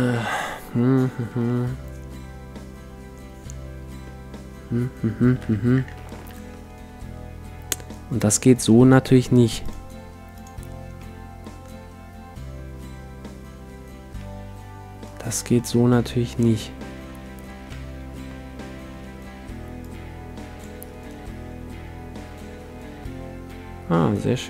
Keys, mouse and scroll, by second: 5.4 t, 8.0 middle click, 9.6-11.4 drag, 11.0-12.9 middle drag, 14.2-17.4 middle drag, 19.8-22.9 drag.